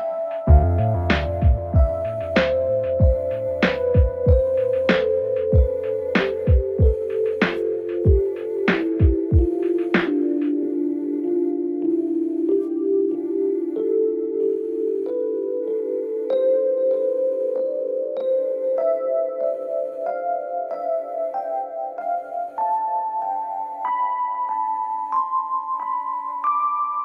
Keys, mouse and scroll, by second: 6.1 click, 9.2 click, 12.2-18.0 drag, 18.0-27.0 drag.